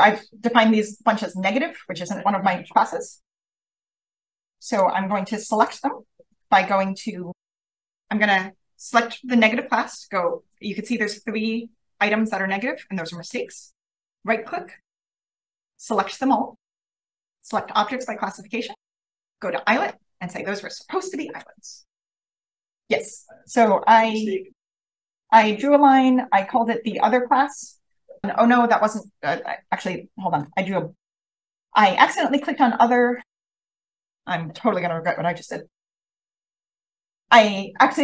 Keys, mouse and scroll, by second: 4.6 click, 5.4 click, 6.3 click, 14.0 right click, 15.3 click, 19.0-20.5 drag, 21.7-23.1 scroll down 1, 22.3 click, 23.1-24.4 scroll down 1, 23.5-23.9 drag, 24.3 v, 24.5 click, 26.0 click, 26.7 click, 27.2 click, 27.3 click, 29.8 v, 30.1 click, 31.8 v, 32.0 click, 32.9 click, 33.6 click, 35.7 click, 35.9 click, 36.9 BackSpace.